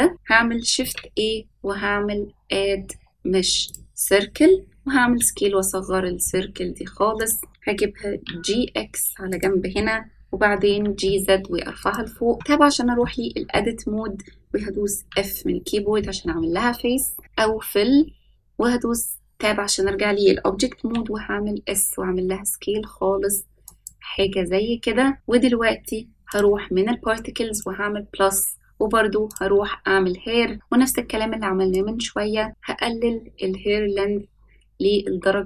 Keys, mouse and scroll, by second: 0.7 shift+a, 4.9 s, 7.9 g, 10.5 g, 12.3 Tab, 14.9 f, 18.5 Tab, 20.7 s, 24.2-25.1 middle drag, 26.2 click, 27.5-28.5 drag, 29.2 click, 31.7-35.4 drag.